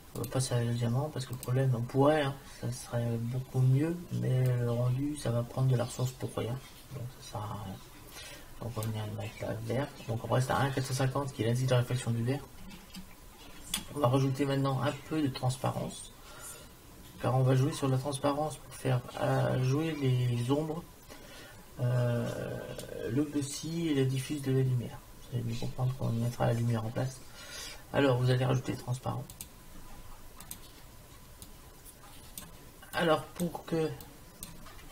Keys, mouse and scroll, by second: 4.5-6.5 drag, 13.7 shift+a, 31.5-33.3 drag, 34.2 click.